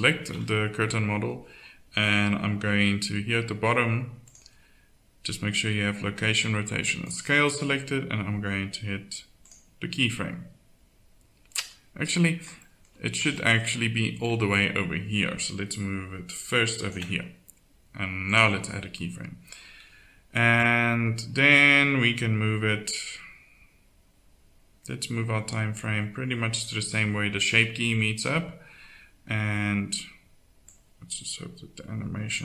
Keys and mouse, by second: 0.3 KP_1, 4.3-9.4 drag, 14.5-15.8 middle drag, 16.4 right click, 18.3-20.4 drag, 20.6 click, 30.6-32.3 drag.